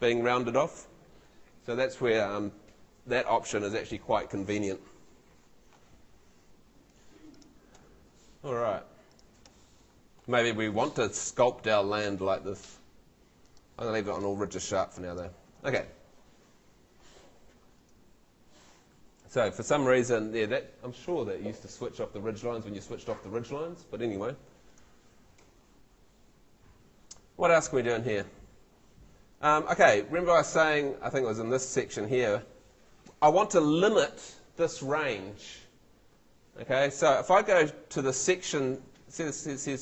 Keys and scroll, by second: 25.4 Escape.